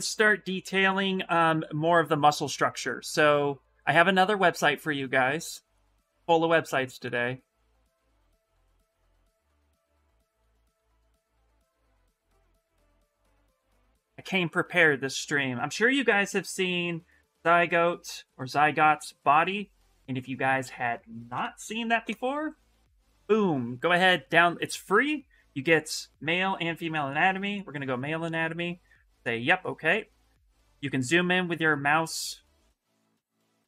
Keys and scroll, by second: 9.0 ctrl+x, 11.4 ctrl+a, 11.6 ctrl+v, 12.4 Return, 21.1 ctrl+v, 21.8 Return.